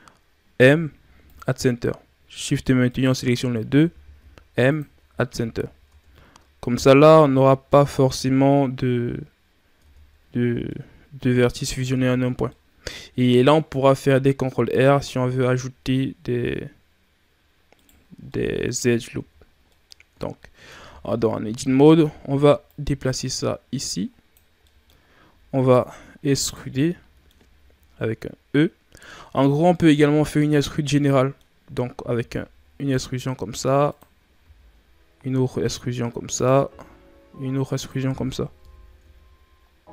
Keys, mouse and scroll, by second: 0.5 m, 2.2 right click, 2.8 shift+right click, 3.4-3.7 shift+scroll down 2, 4.1 m, 5.0 Tab, 5.4-5.8 scroll down 3, 5.8 Tab, 6.5-7.0 scroll down 2, 7.0 a, 7.7-8.5 scroll down 4, 8.5-9.8 scroll up 5, 9.8 Tab, 10.2-10.6 scroll down 5, 10.6-11.4 middle drag, 11.4-11.8 scroll up 4, 11.8 Tab, 12.4-14.3 middle drag, 14.3 ctrl+r, 18.0 scroll down 2, 18.2 middle click, 18.7-19.1 scroll up 2, 19.1 Tab, 19.4 scroll down 2, 19.6 middle click, 20.0 Tab, 20.7 Tab, 21.3 a, 21.6 a, 22.6-24.6 drag, 24.6 middle click, 24.9-25.5 scroll up 2, 25.5 alt+right click, 26.3 alt+right click, 26.7-30.0 middle drag, 30.0 a, 30.4 a, 30.9-32.1 middle drag, 32.1 e, 34.4 e, 38.5 KP_1, 38.9 Tab, 39.6-39.9 scroll down 2.